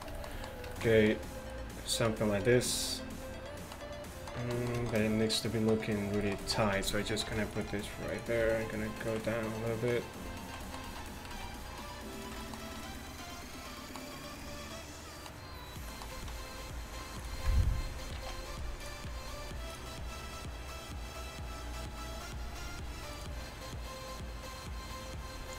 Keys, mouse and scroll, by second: 0.8 middle click, 7.3 ctrl+r, 8.5 alt+s, 11.4 alt+s, 14.2-15.2 middle drag.